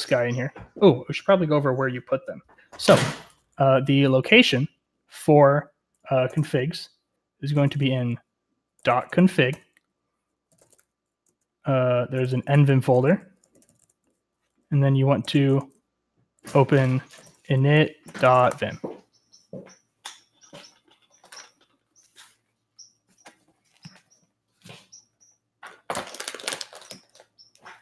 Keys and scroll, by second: 4.3 ctrl+t, 6.1-14.2 typing, 16.0-18.9 typing.